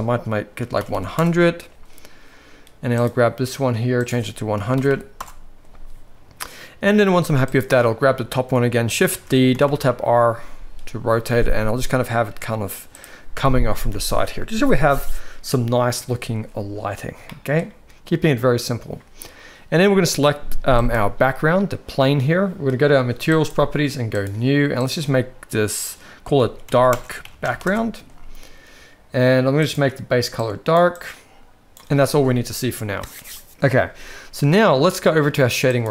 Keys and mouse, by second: 0.9 0, 4.0-5.2 drag, 4.9 0, 7.5-7.9 drag, 9.1 shift+d, 17.3-17.7 shift+middle drag, 23.3 click, 24.1 click, 24.8-27.7 drag, 29.6 click.